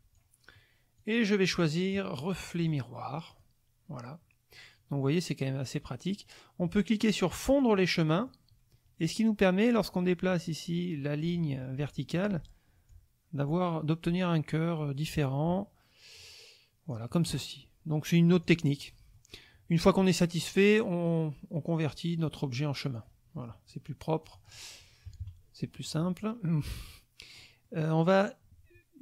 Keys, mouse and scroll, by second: 1.0 click, 2.6 click, 3.3 click, 7.6 click, 8.1 click, 8.3 middle click, 9.9-11.5 drag, 12.9-17.1 drag, 18.3 click, 18.8 click, 20.4 click, 22.9 click, 24.2-24.7 drag, 25.1 KP_Subtract, 26.2-27.5 drag, 27.6 click.